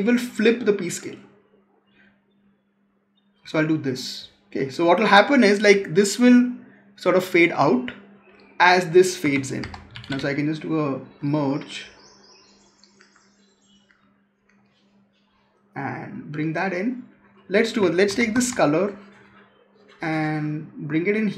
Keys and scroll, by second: 9.1 Tab, 17.9 ctrl+c, 18.2 ctrl+v.